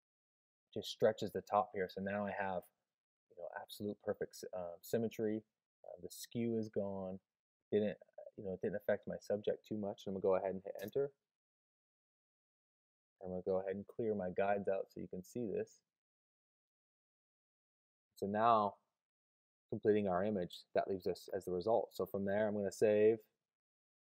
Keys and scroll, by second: 22.6 super+s.